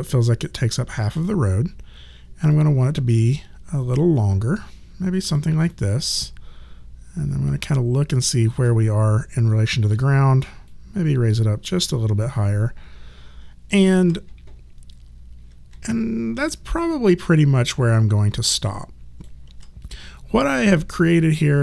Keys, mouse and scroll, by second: 2.5 click, 5.7 alt+click, 9.9 w, 10.6 click, 12.4 alt+click, 15.9 alt+click, 20.2 click.